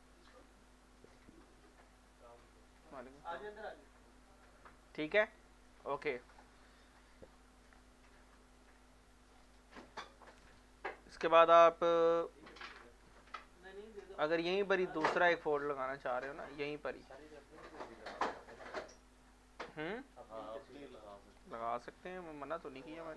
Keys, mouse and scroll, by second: 0.4 scroll down 1, 4.8 scroll up 1, 5.2 scroll down 1, 8.5 click, 8.8 click, 9.3 scroll down 1, 13.0 alt+Num_Lock, 13.0 scroll down 1, 13.1-14.6 alt+drag, 14.6 scroll down 1, 15.1 scroll up 1, 16.2 alt+middle click, 16.6-18.2 scroll down 3, 21.8 click, 22.0 click.